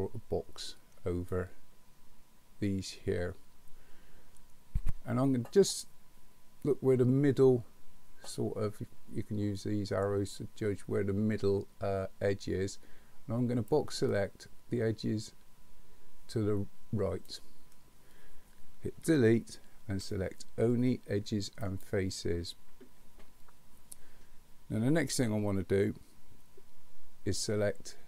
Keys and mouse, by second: 13.9-17.3 drag, 19.0 Delete.